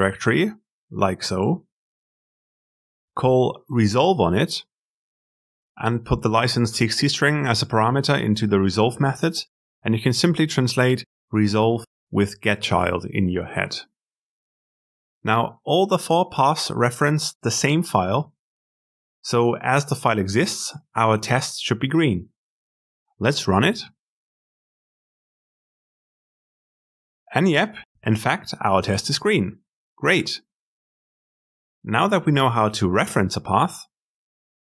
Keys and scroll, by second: 22.6 ctrl+alt+F10.